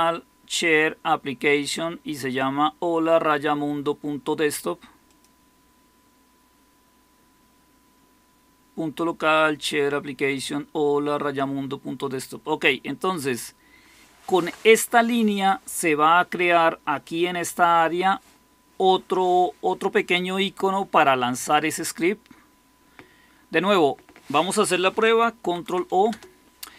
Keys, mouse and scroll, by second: 14.3 Down, 25.3 ctrl+o, 26.0 Return.